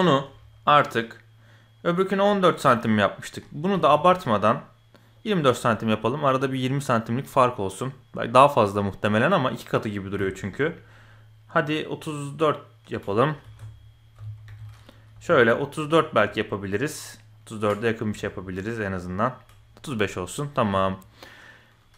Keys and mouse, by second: 3.7 s, 5.8 middle click, 7.2 middle click, 10.0 s, 13.4 ctrl+z, 14.1 KP_8, 14.4 KP_7, 15.1 s, 20.1 middle click, 20.7 KP_1.